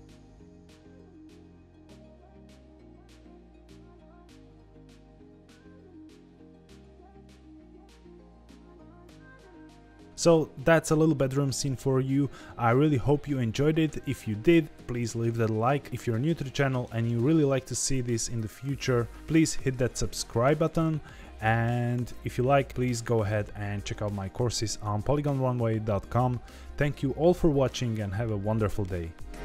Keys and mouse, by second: 3.0 ctrl+s, 3.2 shift+middle click, 4.0 ctrl+s, 5.1 click, 5.4 click, 5.8 click, 7.5 z, 7.7 ctrl+s.